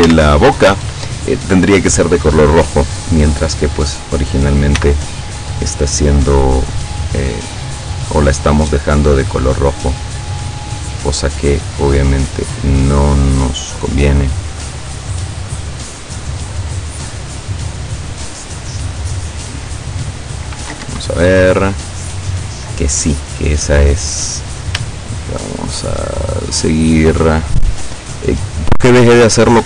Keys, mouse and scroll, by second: 0.1 a, 4.8 c, 6.0-6.4 scroll up 2, 6.6-6.9 scroll down 2, 7.2 scroll down 2, 7.8-17.4 drag, 17.9-20.0 drag, 20.9 Escape, 21.2-24.8 middle drag, 25.5 shift+right click, 26.1 shift+right click, 27.0 shift+right click, 27.8 shift+right click, 28.3 shift+right click, 29.0 shift+right click.